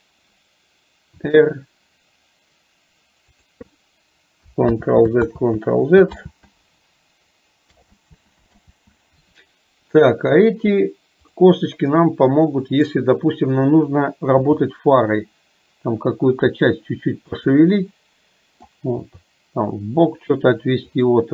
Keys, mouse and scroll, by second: 12.0 middle click, 17.9 middle click.